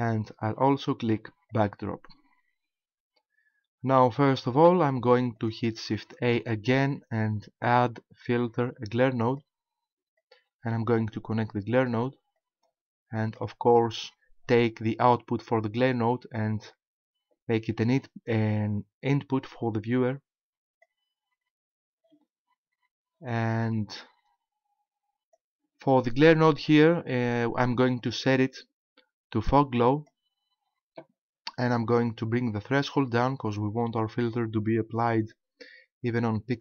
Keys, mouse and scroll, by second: 1.5 click, 5.4 click, 6.0 shift+a, 10.2 click, 12.4 click, 15.8 click, 22.8-24.0 scroll down 1, 24.0 click, 28.0 click, 33.0 click.